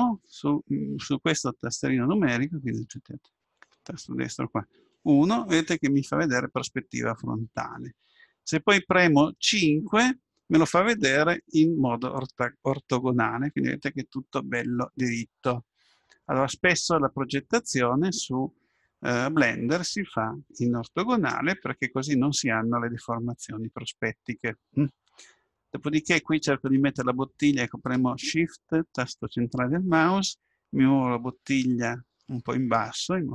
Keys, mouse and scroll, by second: 2.7-4.7 right drag, 4.8 KP_1, 9.6 KP_5, 26.8-28.7 middle drag, 31.2-32.9 middle drag.